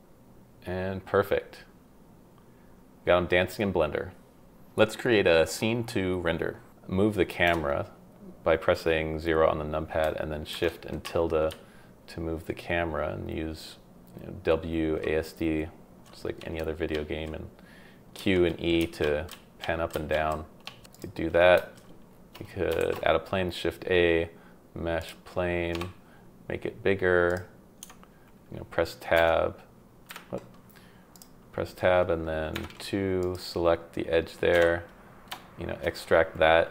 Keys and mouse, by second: 5.2 space, 6.2 shift+middle drag, 7.4 KP_0, 10.5 shift+`, 11.5-16.0 w, 16.4 s, 16.9 q, 18.1-21.7 typing, 20.9-21.5 drag, 22.8 shift+a, 25.7 s, 27.8 Tab, 29.1 F2, 33.2 click, 33.2 2, 34.5 e.